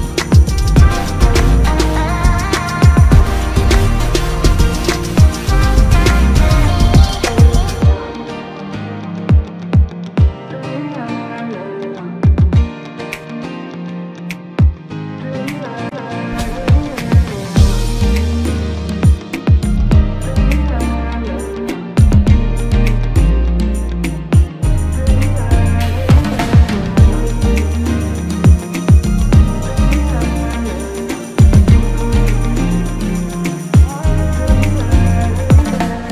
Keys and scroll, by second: 18.9 ctrl+KP_Add, 19.5 space, 31.5 ctrl+KP_Subtract.